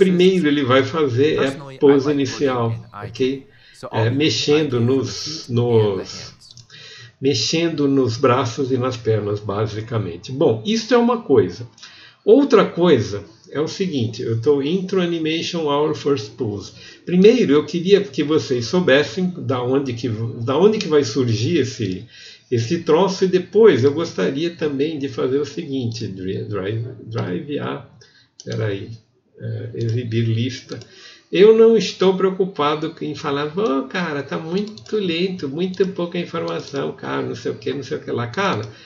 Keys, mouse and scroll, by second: 0.4 g, 0.4 r, 0.8 click, 0.9 click, 1.6 middle click, 2.2 click, 3.3 click, 4.8 click, 5.3 click, 6.1 n, 6.5 middle click.